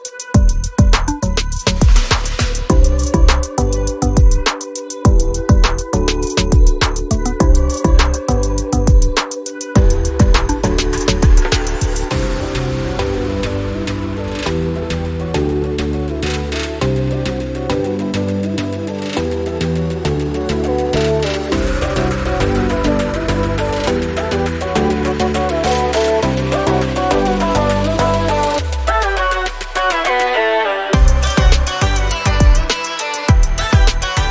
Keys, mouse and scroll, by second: 4.5 scroll up 1, 5.8 ctrl+z, 6.8 click, 16.3 alt+scroll down 2, 17.5 scroll up 1, 18.7 click, 22.3 ctrl+click, 22.9 alt+scroll down 1, 23.5 scroll up 1, 24.6 click, 27.9 ctrl+z, 28.5 click, 29.1 z, 30.0 click, 31.9 alt+scroll up 2, 32.3 ctrl+z, 32.6 typing.